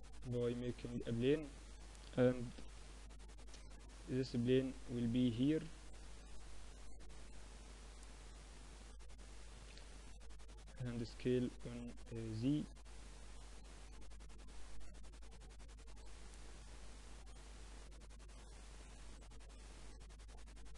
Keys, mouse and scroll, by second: 1.5 r, 3.2-6.0 drag, 8.6 s, 10.1-12.0 drag, 15.0 Tab, 16.1 click, 16.8-17.9 middle drag, 17.9 click, 18.1-19.3 middle drag, 19.3-20.5 drag, 20.5 KP_7.